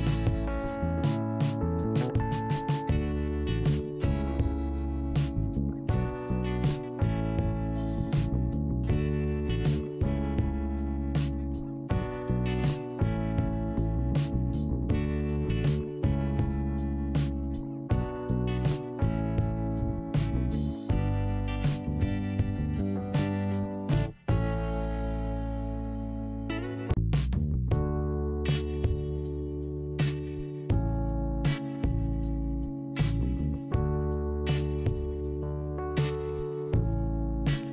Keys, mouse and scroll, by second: 2.4 click, 3.1 click, 3.2 click, 4.6 scroll down 1, 5.2 scroll up 1, 6.4 scroll down 1, 7.1 scroll up 2, 7.8 scroll down 1, 9.0 click, 9.5 click, 11.0 click, 13.0-13.4 scroll down 1, 13.4 scroll up 1, 14.7 scroll up 1, 15.4 click, 15.5 click, 16.7 click, 17.9 click, 21.0 click, 22.4 click, 23.9 click, 24.0 click, 25.5 click, 28.8 scroll up 1, 29.0 click, 29.1 click, 31.0 scroll down 1, 31.9 click, 32.9 scroll down 1, 35.4 click, 37.3 click, 37.4 click.